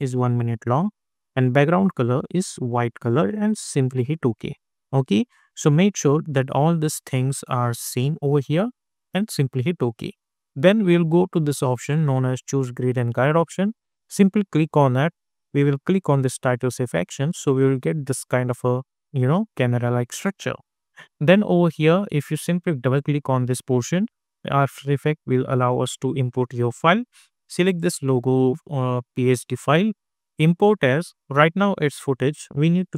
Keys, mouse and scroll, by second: 1.1 click, 3.9 click, 9.2 click, 9.4 click, 13.9 click, 16.7-18.4 scroll down 1, 21.2 click, 24.4 click, 27.7 click, 32.0 click.